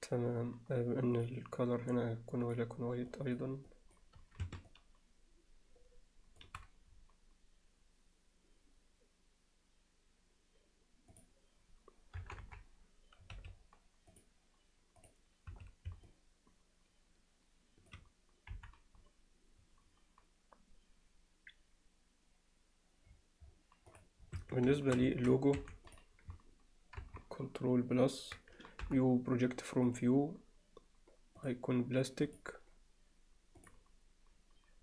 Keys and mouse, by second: 12.2 KP_0, 12.4 KP_7, 13.4 z, 14.1 click, 15.0 click, 15.5 z, 16.1-17.9 alt+middle drag, 18.5 KP_1, 24.0 click, 24.5 Tab, 24.8 alt+shift+middle click, 25.2 ctrl+alt+middle click, 25.7 3, 25.9 click, 27.0 ctrl+KP_Add, 28.9 u, 31.5 click, 32.3-33.8 drag.